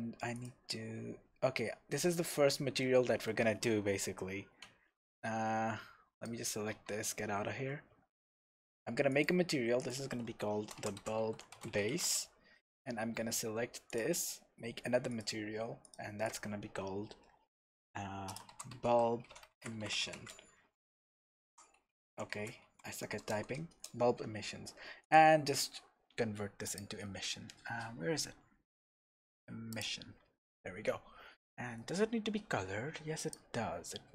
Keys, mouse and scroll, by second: 0.3 click, 1.4 Tab, 1.9-3.8 middle drag, 2.4-2.8 scroll down 2, 3.8 KP_0, 4.5-5.4 scroll down 2, 5.4 scroll down 1, 6.1 click, 6.7 Tab, 6.9 scroll up 2, 9.1 click, 9.8-14.0 drag, 12.1 Return, 15.1-33.3 drag, 23.8 Return.